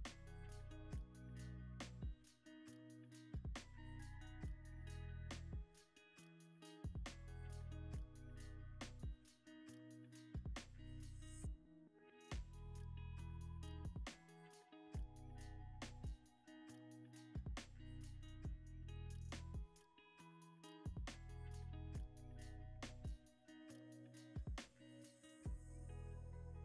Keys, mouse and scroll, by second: 10.2 g, 10.3 z, 16.8 shift+a, 20.8 g, 21.1 y, 25.9 r, 26.0 x.